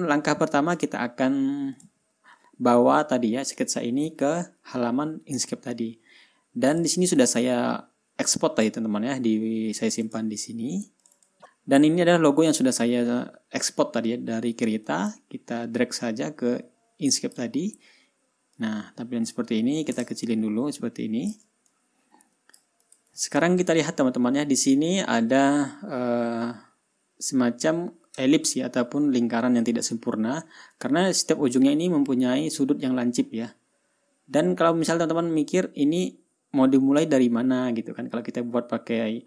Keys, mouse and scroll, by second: 0.0 ctrl+scroll up 2, 0.2 ctrl+middle click, 0.5 ctrl+scroll down 2, 0.7-2.2 ctrl+middle drag, 2.2 click, 7.2 click, 10.4 click, 12.1 scroll down 1, 15.3-18.0 drag, 19.0-19.9 drag, 20.8-21.9 ctrl+shift+drag, 22.1-23.2 ctrl+shift+drag, 23.3 click, 24.3 ctrl+scroll up 2, 24.9 ctrl+scroll down 2, 25.3-25.9 ctrl+scroll up 4.